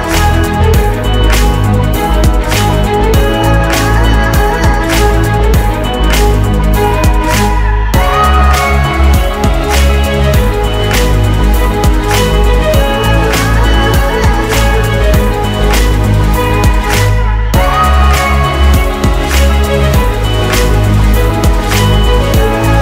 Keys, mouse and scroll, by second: 1.8 double click, 3.4 ctrl+c, 4.7-5.4 scroll down 1, 5.4 shift+click, 6.4 typing, 11.8 typing, 17.4 scroll down 1.